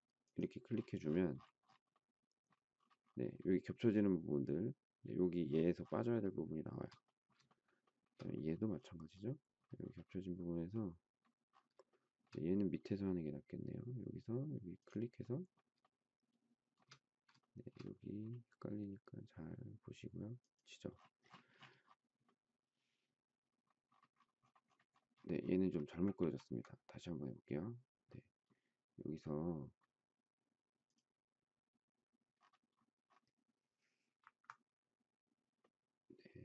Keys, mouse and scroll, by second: 6.2 shift+middle click, 7.4 shift+middle click, 7.6 shift+middle click, 7.8 shift+middle click, 7.9 shift+double middle click, 11.9 shift+middle click, 15.8 shift+middle click, 17.4 shift+middle click, 26.1 ctrl+z.